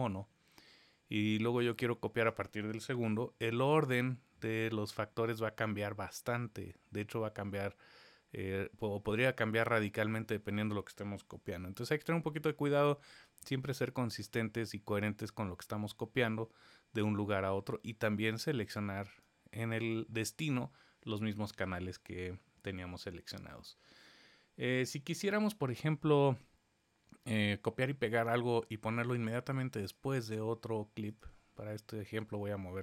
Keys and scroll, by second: 2.9 super+v, 11.3 super+z.